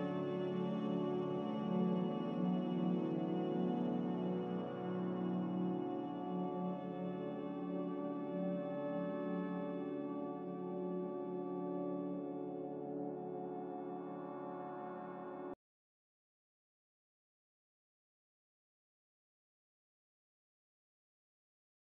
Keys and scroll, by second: 17.5 z.